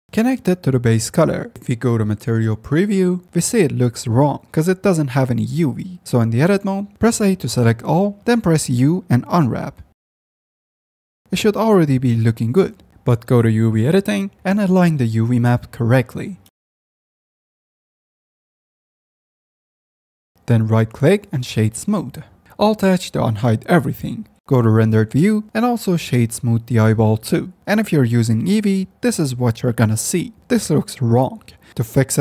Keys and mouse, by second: 0.7-1.4 drag, 2.0 middle click, 3.4 z, 6.4 F10, 7.0 Tab, 8.2 a, 8.8 u, 11.5 Tab, 12.4 Tab, 13.5-14.8 drag, 14.9 Tab, 15.3 click, 15.8 click, 16.2 s, 16.6 ctrl+z, 17.1 click, 17.6 s, 19.5 3, 19.9 s, 20.3 Tab, 22.8 alt+h, 24.2 z, 24.4 F10, 24.4 Tab, 24.6 z, 26.0 drag, 26.9 drag, 27.5 click, 28.6-29.4 middle drag.